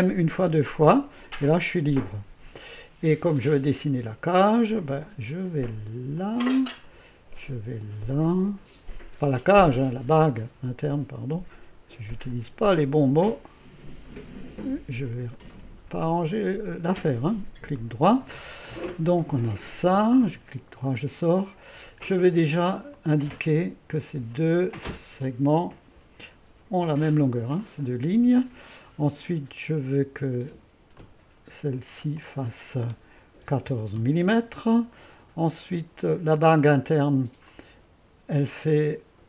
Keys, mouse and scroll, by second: 0.5 m, 4.1-5.1 middle drag, 6.2 click, 9.5 click, 12.3 click, 15.4-16.6 drag, 17.0-18.4 drag, 20.1 click, 23.0 click, 24.4-26.9 drag, 26.9 e, 31.0-33.5 drag, 33.2-34.2 typing, 37.5 click.